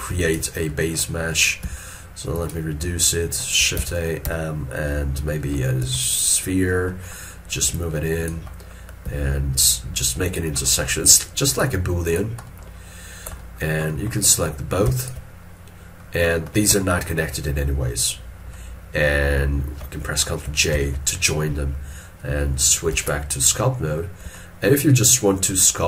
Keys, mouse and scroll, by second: 1.7 s, 3.9 shift+a, 4.3 m, 7.0 middle click, 9.1 s, 10.7 middle click, 13.4 scroll up 1, 13.5 shift+middle click, 14.9 middle click, 15.1 shift+click, 15.8-16.3 scroll up 1, 16.9 shift+middle click, 17.2 shift+scroll up 1, 18.6 middle click, 20.5 middle click, 20.8 ctrl+j, 23.0 ctrl+Tab, 24.4 shift+middle click.